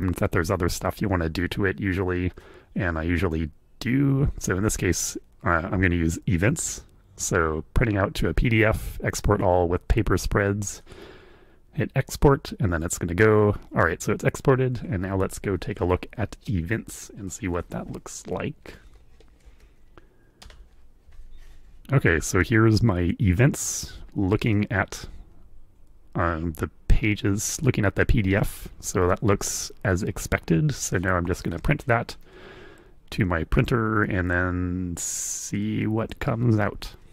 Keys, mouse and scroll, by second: 10.8 click, 18.6 Up, 19.4 Up, 20.4 Return, 24.5-30.2 drag, 31.4 ctrl+p.